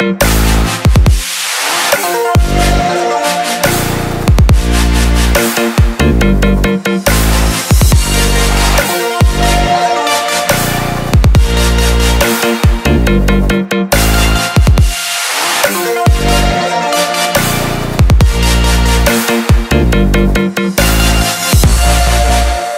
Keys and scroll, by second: 0.9 ctrl+t.